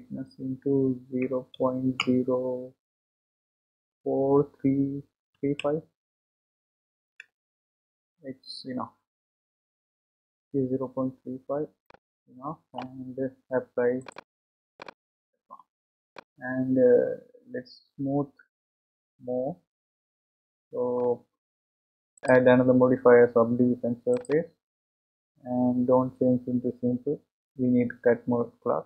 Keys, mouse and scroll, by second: 11.8-14.0 middle drag, 14.0-16.1 drag, 16.1-19.1 middle drag, 22.2-24.2 drag, 24.4-26.0 drag.